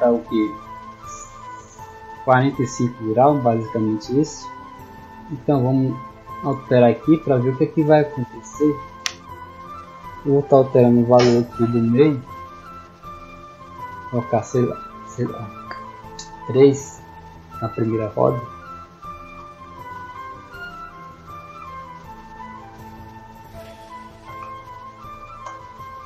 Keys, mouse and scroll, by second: 5.0-7.0 middle drag, 7.6 middle click, 10.4 click, 16.2 middle drag, 18.5 w, 18.8 a, 19.3 a, 19.8 d, 20.7 middle click.